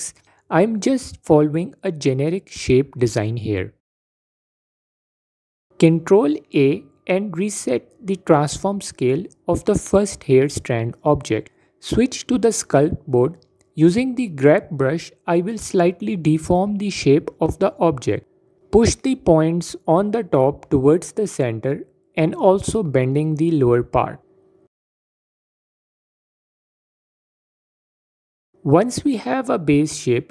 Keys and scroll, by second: 12.0 Tab, 19.9 f.